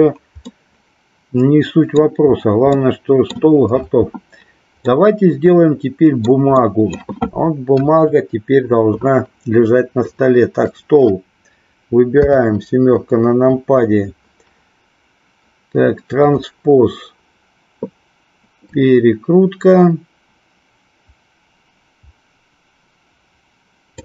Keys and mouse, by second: 0.5-2.2 middle drag, 2.8 middle click, 4.9-6.3 middle drag, 6.7 middle click, 7.8 KP_1, 10.0 click, 12.2 KP_7, 16.2 click, 18.7-24.0 drag.